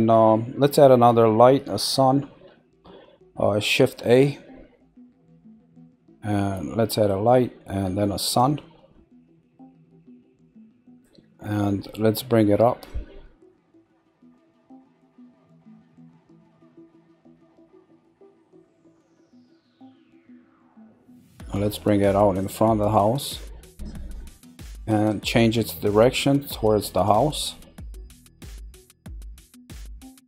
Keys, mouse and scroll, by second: 12.8 click, 16.3 click, 19.2 click, 20.6-22.4 middle drag, 22.4 click, 25.0 click, 27.0 click, 27.8-28.8 middle drag, 28.8 scroll up 1.